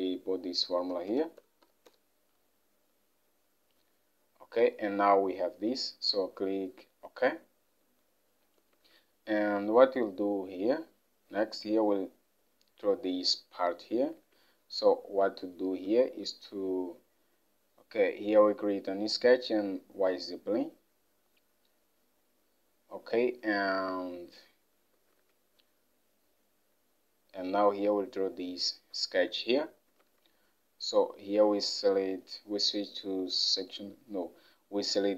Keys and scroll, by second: 0.0-2.6 typing, 4.1-4.8 typing, 8.8 alt+Tab, 15.8 Home, 25.2 alt+Tab.